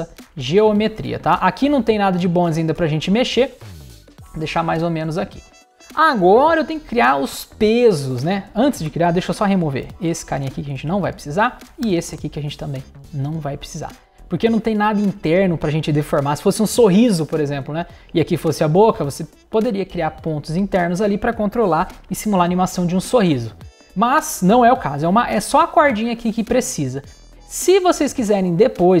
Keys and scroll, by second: 9.8 super+BackSpace, 11.8 super+BackSpace.